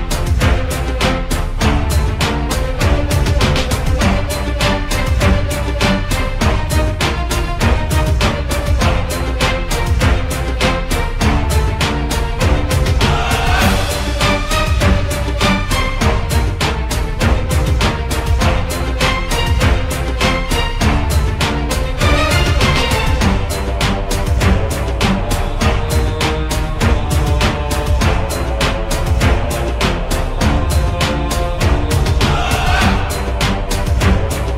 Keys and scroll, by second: 0.0-1.5 typing, 2.7-3.6 typing, 4.7 c, 5.4 F3, 10.7 c, 12.7-15.7 typing, 19.4 w, 20.4-21.2 typing, 21.5 F3, 23.9 c, 24.6 F3, 26.6-29.9 typing, 31.2 c, 32.5 m.